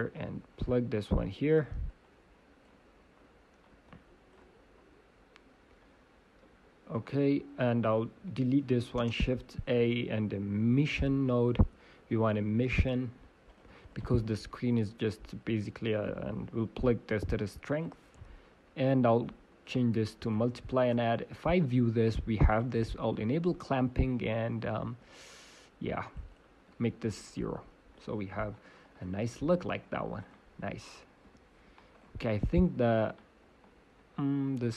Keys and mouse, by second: 0.1-2.7 drag, 3.8-4.9 drag, 8.0-12.5 drag, 8.1 Delete, 12.5 shift+a, 12.5 m, 13.9-17.0 drag, 17.8 click, 20.7 click, 24.0-26.2 drag, 26.3-28.2 drag, 28.9 click, 29.3-32.5 middle drag, 31.2 g, 32.5 click, 33.2 middle click, 33.6 click, 33.8 middle click.